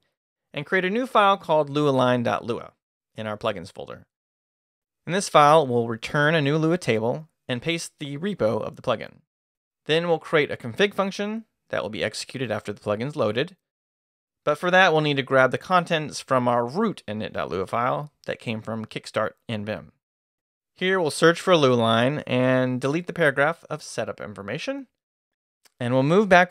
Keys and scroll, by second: 0.0 shift+d, 1.4-7.1 typing, 7.4 shift+Left, 7.6 Return, 8.4-14.4 typing, 16.8 Escape, 17.5-24.4 typing, 26.1 Down.